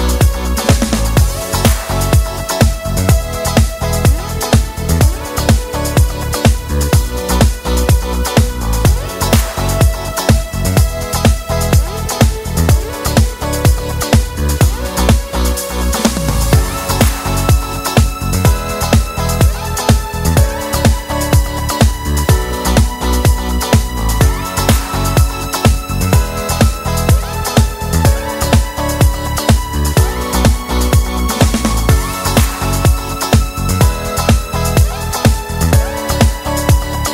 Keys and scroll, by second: 0.4 space, 5.8 space, 15.7 space, 33.9 u.